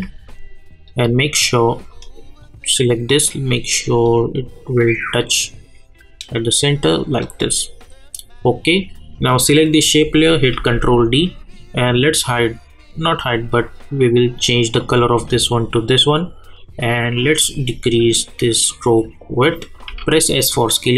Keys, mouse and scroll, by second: 0.8-8.6 drag, 10.5 ctrl+d, 14.0-19.9 drag, 19.9 s, 20.8-20.9 drag.